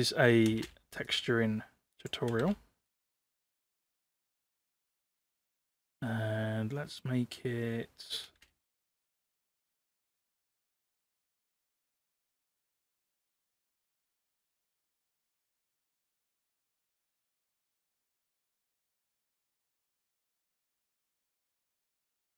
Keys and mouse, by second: 0.5 space, 1.2 click, 2.3 space, 2.9 click, 3.8 click, 8.3 space, 9.0 click, 9.2 click, 9.3 middle click, 9.4 click, 9.4 space, 9.6 click, 9.8 click, 9.9 click, 10.1 click, 10.1 space, 10.2 click, 10.2 space, 10.3 middle click, 10.4 middle click, 10.7 ctrl+shift+t, 12.2 click, 12.6 middle click, 12.8 click, 13.1 ctrl+c, 13.2 ctrl+v, 13.3 click, 13.3 middle click, 13.4 click, 13.5 click, 13.7 click, 13.7 space, 13.8 ctrl+c, 13.8 ctrl+v, 13.8 shift+middle click, 13.9 click, 14.0 ctrl+c, 14.0 ctrl+v, 14.1 click, 14.1 space, 14.2 click, 14.4 click, 14.5 click, 15.0 click, 15.4 click, 15.5 ctrl+v, 15.6 click, 15.9 click, 16.0 ctrl+c, 16.1 ctrl+v, 16.2 ctrl+c, 16.3 ctrl+v, 16.6 click, 16.6-21.1 typing, 16.8 ctrl+c, 16.8 ctrl+v, 16.9 click, 17.0 ctrl+c, 17.0 ctrl+v, 17.1 click, 17.2 ctrl+c, 17.2 click, 17.3 middle click, 17.5 click, 17.6 ctrl+c, 17.7 ctrl+v, 17.8 middle click, 18.2 click, 18.4 click, 18.5 middle click, 18.8 click, 18.9 click, 19.1 click, 19.1 middle click, 19.3 shift+middle click, 19.4 click, 19.4 ctrl+z, 19.5 click, 19.6 middle click, 19.7 click, 20.0 click, 20.1 ctrl+c, 20.1 ctrl+v, 20.2 click, 20.4 middle click, 20.7 middle click, 20.9 Tab, 21.2 Tab, 21.3 middle click, 21.4 middle click, 21.8 middle click.